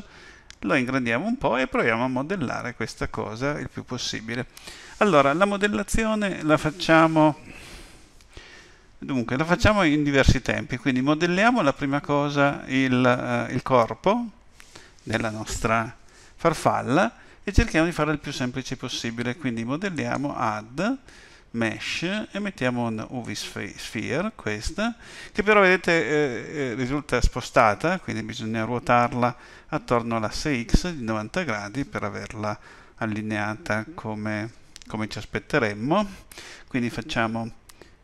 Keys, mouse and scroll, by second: 0.0 scroll up 1, 19.9 click.